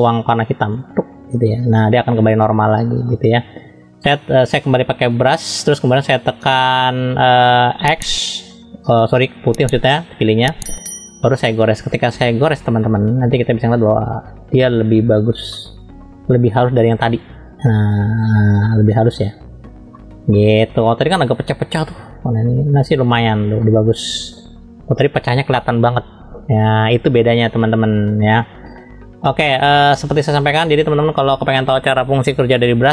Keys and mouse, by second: 1.3 click, 1.9 middle click, 3.1 shift+middle click, 5.2 click, 10.3 middle click, 12.8 shift+middle click, 13.9 click, 15.5 middle click, 17.0 shift+middle click, 18.6 middle click, 19.9 shift+middle click, 23.6 middle click, 28.7 middle click.